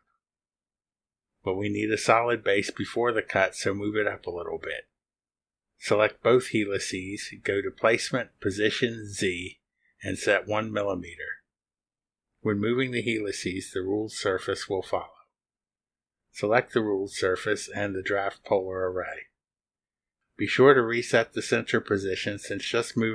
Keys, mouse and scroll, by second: 4.2 click, 5.0 click, 5.5 ctrl+click, 7.5 click, 8.5 click, 9.5 click, 11.6 click, 12.4 click, 16.0 click, 18.8 click, 21.0 click.